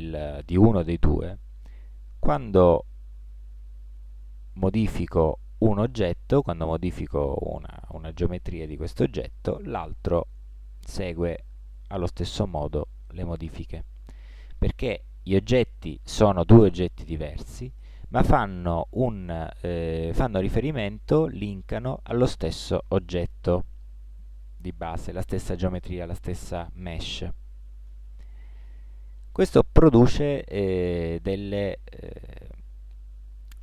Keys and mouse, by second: 1.6 click, 2.1-4.4 right drag, 2.9 g, 8.3-9.4 right drag, 9.4 click, 9.4 g, 9.7 right click, 13.0-15.8 middle drag, 27.9 Tab, 28.8-31.0 middle drag.